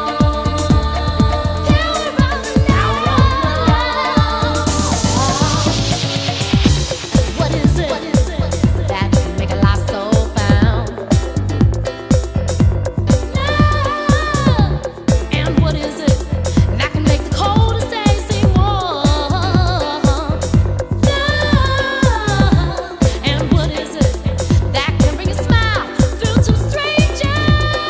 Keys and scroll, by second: 3.5 super+Tab.